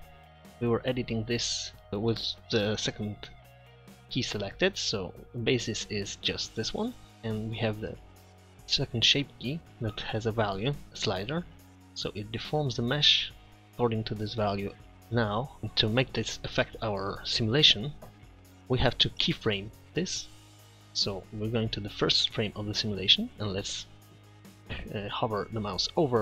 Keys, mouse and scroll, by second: 0.3 Tab, 4.4 click, 6.3-7.1 middle drag, 9.2-10.5 middle drag.